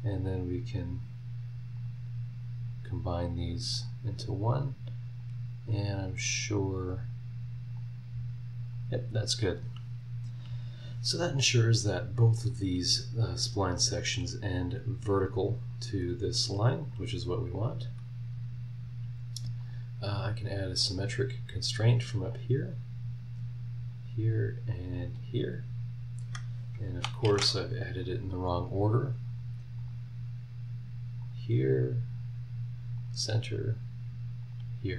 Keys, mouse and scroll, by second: 0.7 click, 1.7 click, 3.7 click, 5.2 click, 7.7-8.9 drag, 12.4 click, 13.7 click, 16.8 click, 19.6 click, 20.8 click, 22.3 click, 23.9 click, 24.9 click, 26.2 Escape, 27.2 ctrl+z, 28.0 click, 29.8 click, 31.2 click, 33.0 click, 34.4 click.